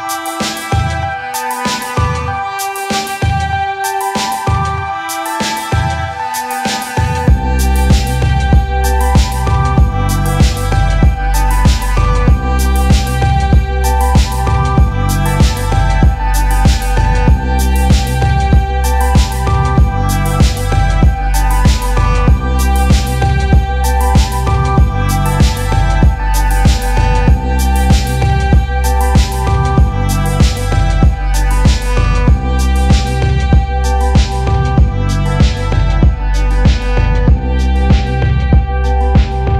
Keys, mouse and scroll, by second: 0.3 click, 1.6 click, 2.9 click, 4.8 click, 8.2 click, 9.0 click, 9.9 click, 10.2 click, 12.0 click, 12.8 click, 13.9 click, 14.6 click, 15.5 click, 16.6 click, 17.3 click, 18.4 click, 18.6-19.1 scroll, 18.9 click, 20.8 click, 22.4 click, 27.3 click, 29.8 click, 30.8 click, 34.4 click, 35.7 click, 35.9 click, 36.8 t, 38.3-39.5 typing.